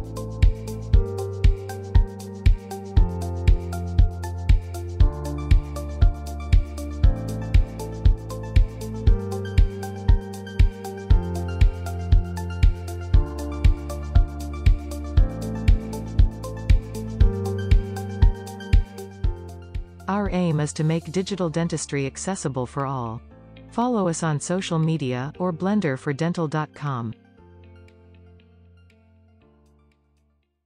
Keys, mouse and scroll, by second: 0.9 scroll up 1, 1.1 click, 3.2 middle click, 3.7 scroll up 3, 3.9 click, 4.3 middle click, 4.5 scroll down 1, 4.6 shift+middle click, 4.8 click, 6.1-7.3 shift+middle drag, 7.3-9.0 drag, 9.7 click, 9.9 scroll down 2, 10.1 middle click, 10.4 scroll up 2, 10.6 shift+middle click, 11.2-13.5 drag, 12.5 middle click, 12.6 scroll down 4, 14.0-15.1 drag, 16.2-20.7 drag, 20.7-21.7 scroll down 3, 21.7-25.2 middle drag, 25.2 click, 26.6-29.0 drag.